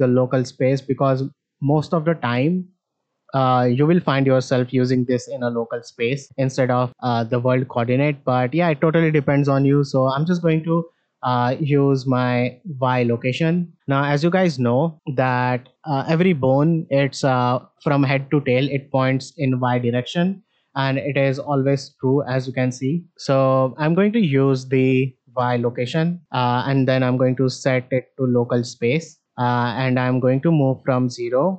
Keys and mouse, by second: 3.7-6.0 drag, 9.0-10.8 drag, 12.0-12.9 drag, 13.6 shift+middle drag, 14.9 middle drag, 15.5 shift+middle drag, 21.2-21.5 shift+middle drag, 23.9 shift+middle click, 24.7 click, 26.7-28.4 drag, 30.5 click.